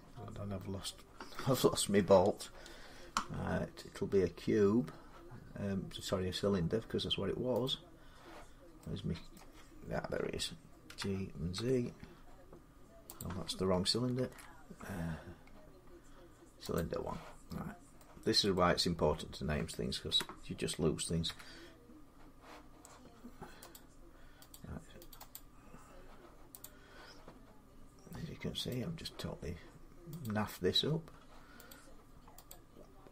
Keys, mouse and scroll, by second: 1.1 middle click, 2.7-3.2 scroll down 5, 3.8-4.5 scroll up 7, 4.5-6.1 scroll down 3, 7.5 click, 9.1 middle click, 9.1 middle click, 10.7-11.3 typing, 12.6 z, 13.0 click, 14.0 ctrl+z, 15.4-16.4 scroll, 16.4 scroll, 16.5 click, 16.9 middle click, 18.3 middle click, 18.7 scroll down 3, 19.1-19.9 scroll, 19.9 g, 21.0 z, 23.5 click, 24.3 click, 25.0 click, 25.1 click, 26.4 click, 28.5 click, 30.0 click, 32.3 click.